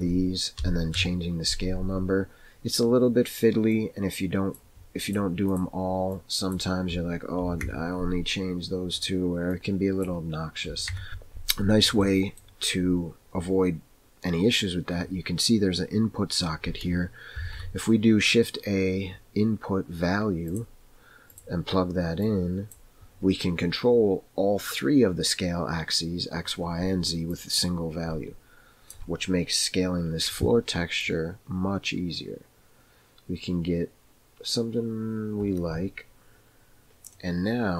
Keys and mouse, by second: 3.9-5.6 drag, 6.1-8.0 drag, 9.5 click, 10.7 KP_5, 10.9 KP_Enter, 11.1 click, 12.1 middle click, 17.4 shift+a, 22.2-22.8 drag, 27.4-29.0 drag, 31.0-36.8 drag, 37.2 middle click.